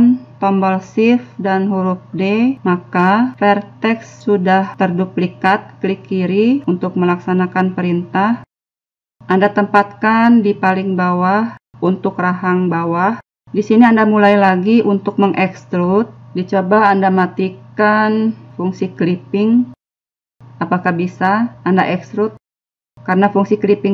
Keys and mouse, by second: 2.1 shift+d, 8.2 click, 11.3 e, 13.3 click, 13.9-15.4 middle drag, 15.4 e, 20.8 click, 21.5 e.